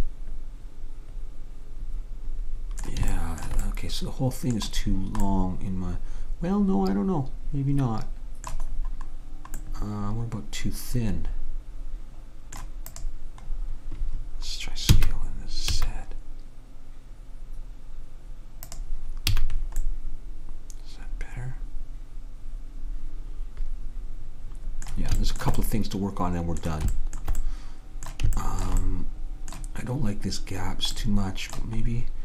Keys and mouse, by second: 3.2-7.1 middle drag, 8.9-10.9 middle drag, 13.0-14.8 drag, 14.9 s, 19.4 a, 25.3 middle click, 25.9-29.2 middle drag.